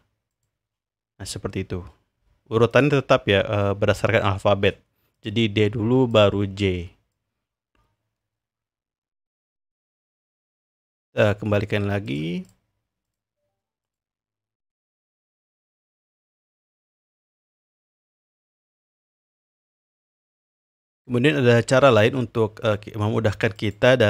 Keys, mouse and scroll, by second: 2.7-4.7 drag, 5.1 click, 6.1 drag, 7.1-9.7 drag, 10.7 click, 12.0 click, 12.4 click, 13.0 click, 13.8 click, 14.7-16.6 drag, 16.7-18.0 drag, 18.6 click, 20.6 click, 23.6 click.